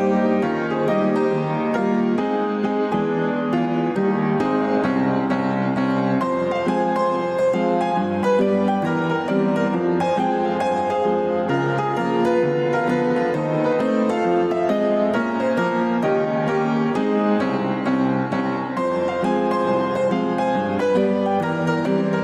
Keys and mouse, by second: 3.4-4.0 drag, 3.4 1, 5.0-5.4 drag, 11.4 alt+z, 12.1-12.7 drag, 14.9-15.4 drag, 16.8 shift+click.